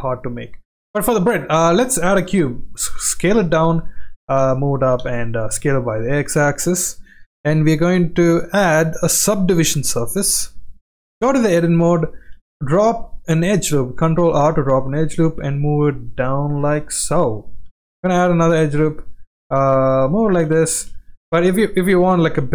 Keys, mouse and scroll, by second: 2.3 s, 3.7 g, 4.8 s, 8.5 click, 9.2-10.4 drag, 11.2 Tab, 12.3 ctrl+r, 17.7 ctrl+r, 20.7 ctrl+z, 21.1 middle click, 22.2 ctrl+r.